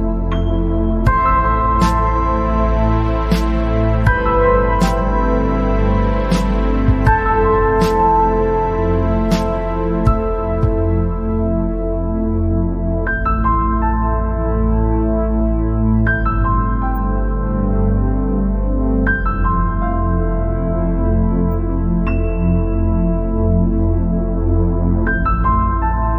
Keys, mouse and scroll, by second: 0.5 scroll up 2, 0.7 scroll down 2, 1.0 middle click, 1.6-1.9 scroll up 4, 1.9 scroll down 1, 2.1-4.6 middle drag, 4.6-4.9 scroll down 5, 4.9-5.5 scroll up 7, 5.6-6.9 middle drag, 6.9-7.2 scroll down 4, 7.3 scroll up 4, 7.7-8.0 scroll down 2, 8.1 middle click, 8.7 scroll down 1, 9.6 KP_7, 10.9 scroll up 1, 11.4 shift+a, 12.3 scroll down 2, 12.4 middle click, 13.1-13.5 scroll up 2, 13.5-14.5 middle drag, 16.9 middle click, 17.3-17.6 scroll up 3, 20.5 scroll up 2, 21.0 scroll down 3, 21.1-24.9 middle drag, 24.9-25.3 scroll down 3, 25.4 scroll up 3.